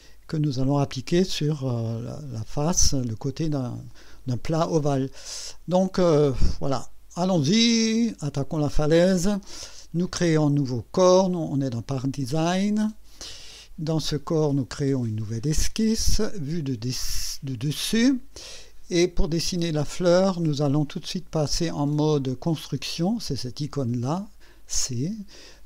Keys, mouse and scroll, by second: 7.4 click, 12.3 click, 14.5 click, 16.2 click, 17.6 click, 18.6 scroll up 1, 19.2-19.9 right drag, 24.3 click.